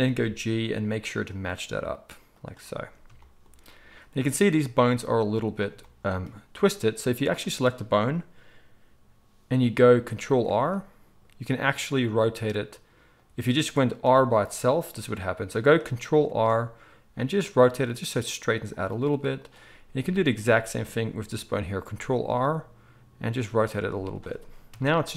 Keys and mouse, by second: 0.0 g, 10.4 ctrl+r, 14.0 r, 16.2 ctrl+r, 16.4 middle click, 19.3 click, 20.1-25.1 shift+middle drag, 21.9 ctrl+r, 24.7 KP_3.